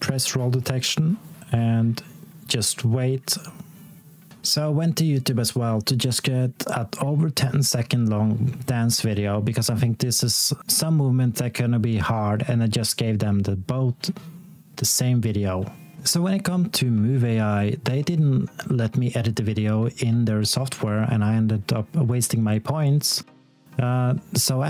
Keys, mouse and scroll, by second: 4.4 click, 13.4 ctrl+c, 14.2 click, 14.8-15.8 scroll down 1, 16.0-16.8 alt+scroll up 1, 16.9 scroll up 1, 23.0 space.